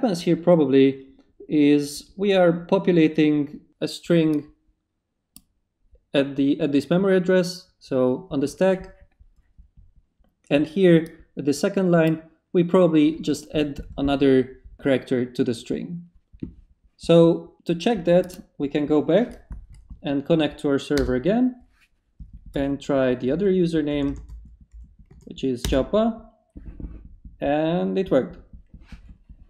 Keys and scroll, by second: 19.7 Up, 20.9 Return, 22.5-25.6 typing, 25.6 Return.